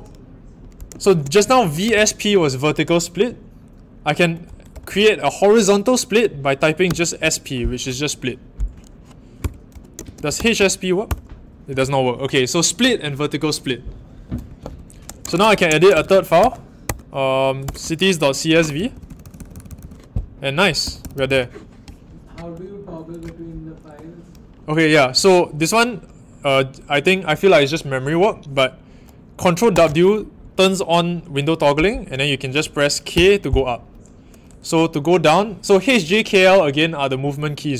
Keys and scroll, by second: 0.8-2.4 typing, 4.4 BackSpace, 4.7 BackSpace, 4.8 BackSpace, 6.8-7.1 typing, 9.4 Return, 10.0-11.0 typing, 14.4-16.8 typing, 17.6 Return, 18.7-21.3 typing, 29.7 ctrl+w, 33.1 k.